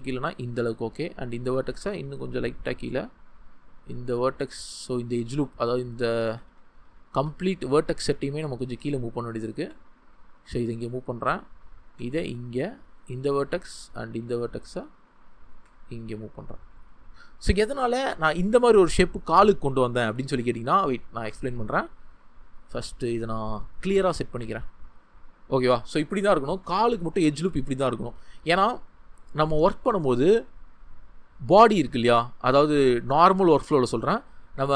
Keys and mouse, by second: 2.5 click, 6.3 ctrl+z, 9.5 g, 10.5-11.6 drag, 12.5 click, 15.5 g, 17.1-18.4 drag, 24.3 g, 28.2 Tab.